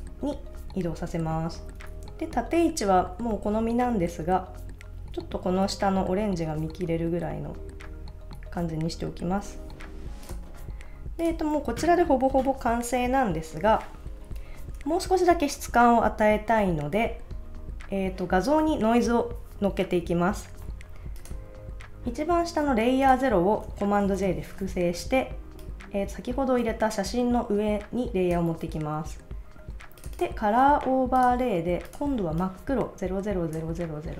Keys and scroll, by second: 7.0 Down, 14.4 super+s.